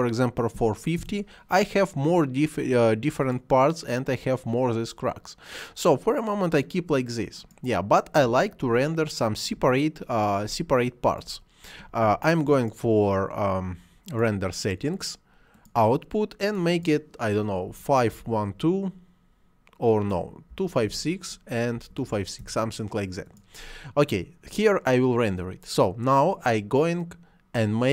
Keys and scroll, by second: 1.0 Return, 17.7 5, 18.2 1, 18.3 2, 20.6-22.2 typing, 22.4 Return.